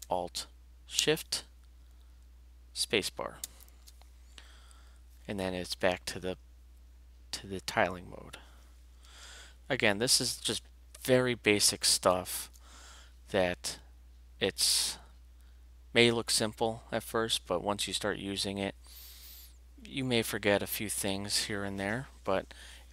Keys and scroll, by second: 3.4 alt+shift+space, 9.7 alt+shift+q, 12.1 alt+shift+q.